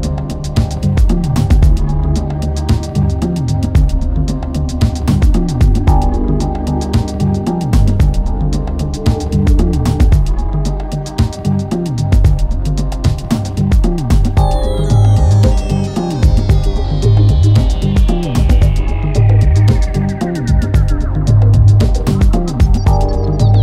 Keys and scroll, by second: 0.6 Delete, 1.2 Delete, 4.1 4, 4.5 F1, 5.2 3, 12.6 ], 20.9 4.